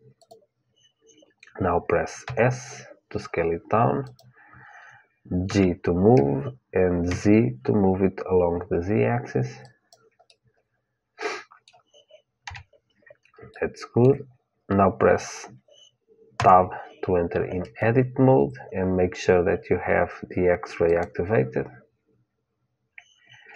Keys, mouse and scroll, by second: 2.0 s, 5.2 g, 10.0-12.2 middle drag, 12.2 KP_1, 13.3-16.1 middle drag, 16.1 Tab, 20.6-22.6 drag.